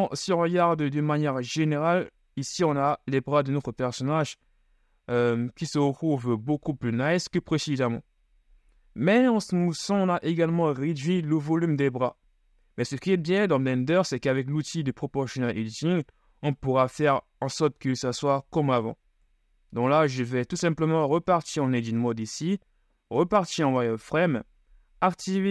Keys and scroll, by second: 6.4 KP_1, 21.2 Tab, 22.2 ctrl+shift+Tab, 23.4 z.